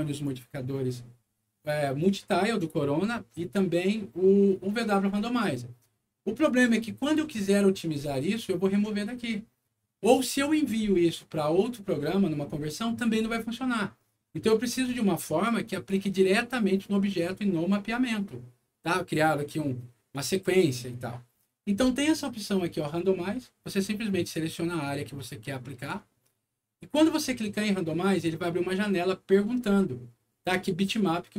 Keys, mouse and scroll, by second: 6.4 click, 15.6 click, 20.0 click, 24.1 click, 25.7 click, 26.1 middle click.